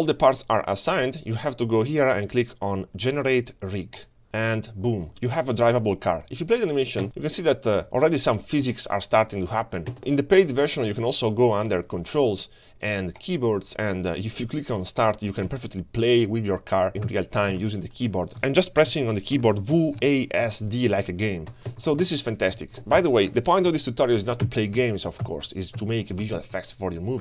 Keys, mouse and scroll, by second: 4.0 click, 4.5-5.3 middle drag, 6.0 space, 6.9-7.3 scroll down 2, 7.3 space, 8.0 click, 8.6 space, 9.7 space, 10.0 click, 11.7 click, 13.2 click, 15.0-27.2 drag.